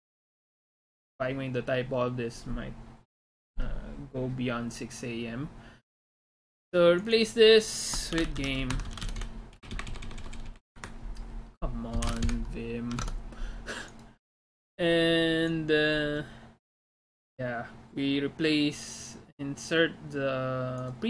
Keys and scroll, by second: 8.6-10.4 typing, 8.8 Escape, 10.7 Escape, 11.9-12.7 typing, 13.1 alt+Tab.